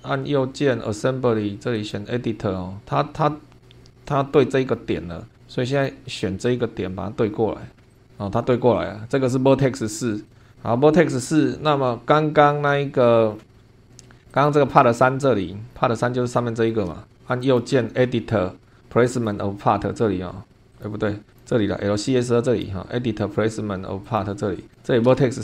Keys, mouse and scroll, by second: 1.7 click, 4.7 scroll up 2, 5.7 click, 6.8-7.1 scroll up 2, 7.9 click, 10.3 click, 10.4 scroll down 2, 13.3 scroll down 2, 14.3 click, 15.7 scroll down 2, 16.3 shift+middle click, 16.5 shift+click, 17.4 right click, 19.1 click, 20.7 click, 21.3 click, 22.5 right click, 24.0 click, 24.7 click.